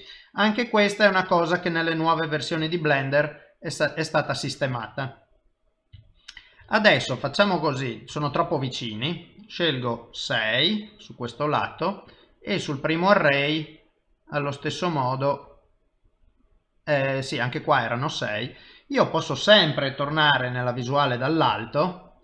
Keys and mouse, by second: 0.2 middle click, 1.3 middle click, 5.0 middle click, 6.4 shift+middle click, 7.5 click, 10.2 middle click, 12.4 click, 13.0 click, 18.0 middle click, 20.5 KP_7, 21.8 shift+middle click.